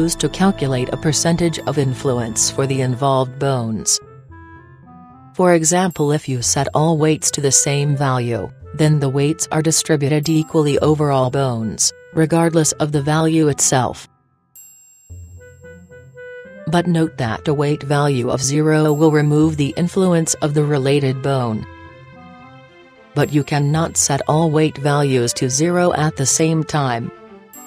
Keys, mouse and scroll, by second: 0.0-1.8 drag, 2.7-4.5 right drag, 4.3-5.4 drag, 5.5 click, 6.2-8.4 middle drag, 11.9-13.6 right drag, 13.8-15.5 drag, 16.0-17.7 drag, 18.0-19.8 drag, 27.2-27.6 drag.